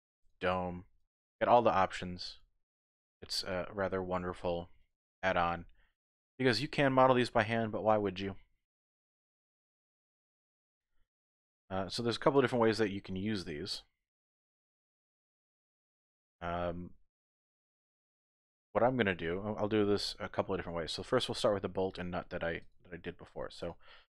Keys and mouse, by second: 1.1-2.4 drag, 3.4-5.0 drag, 5.7-7.7 middle drag, 12.3-13.5 drag, 15.1-18.2 drag, 22.7 click, 23.6 click.